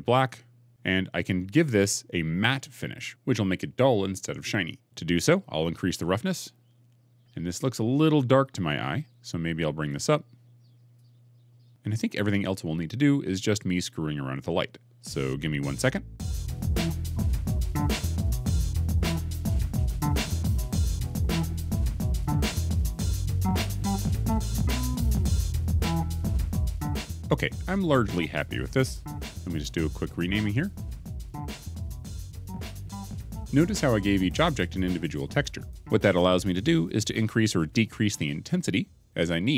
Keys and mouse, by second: 6.2 click, 16.3-23.1 typing, 17.7 alt+r, 17.7 alt+s, 17.9 KP_Enter, 18.4 Escape, 20.9 ctrl+z, 23.5 shift+click, 24.4 click, 24.5-26.2 typing, 25.1 shift+click, 30.6 click, 30.8 shift+click, 30.9 Left, 31.1-32.9 typing, 31.4 click, 31.9 click, 32.7 click, 34.5 click.